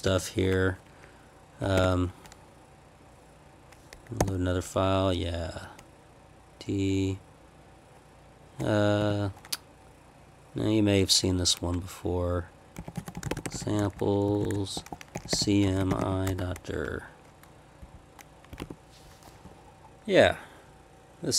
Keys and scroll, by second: 0.0 p, 1.6 Escape, 1.7 o, 4.2 y, 9.0 d, 12.5-16.5 typing, 17.8 Page_Down, 18.6 ctrl+p, 19.4 Left, 19.9-21.3 Left.